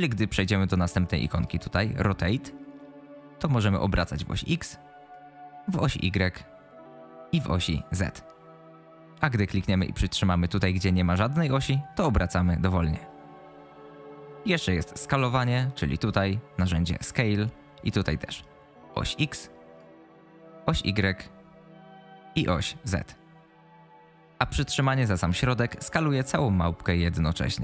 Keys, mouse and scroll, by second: 4.0-5.1 drag, 5.7-6.9 drag, 7.8-9.0 drag, 11.2-14.3 drag, 17.0 click, 18.4-19.8 drag, 20.7-22.0 drag, 22.5-24.1 drag, 25.7-27.6 drag.